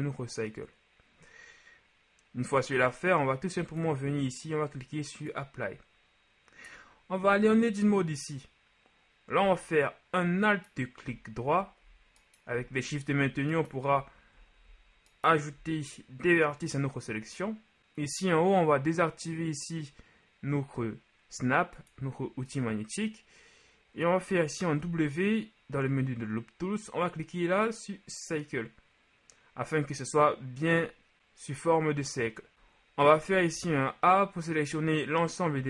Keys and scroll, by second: 7.3 Tab, 14.7 typing, 24.9 w, 33.2 a, 33.6 a, 35.5 KP_3.